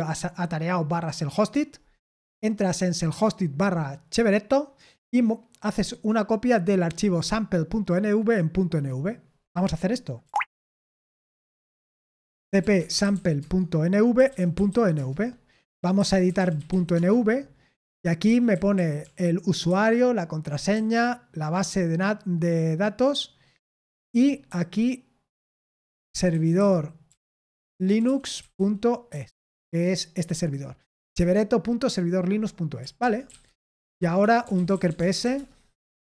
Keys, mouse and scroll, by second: 8.7 click, 9.4-17.1 typing, 18.2-19.6 typing, 20.7 typing, 23.6-29.6 typing, 32.7-35.7 typing.